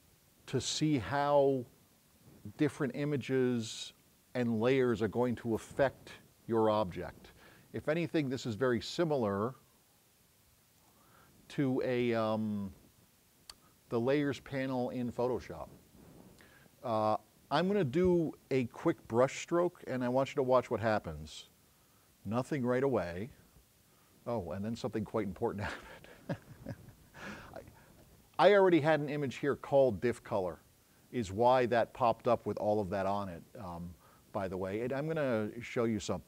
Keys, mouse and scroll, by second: 31.4 click.